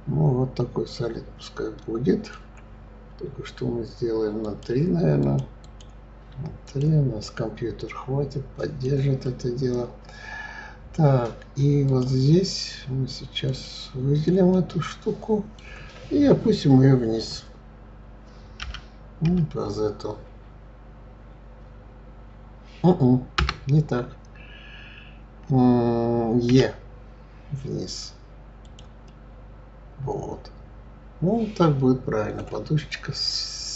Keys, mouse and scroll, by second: 4.4 click, 5.2 click, 6.6 click, 7.2-10.2 middle drag, 11.9-13.6 drag, 14.5-17.5 middle drag, 18.6 g, 26.5 e, 29.0-32.1 middle drag, 32.7 click.